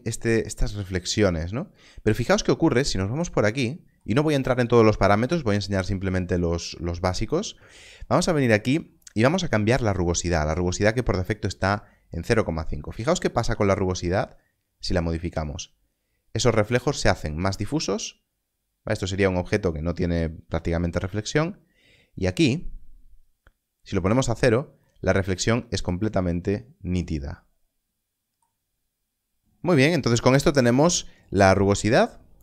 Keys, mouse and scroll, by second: 12.6 click, 31.7 click.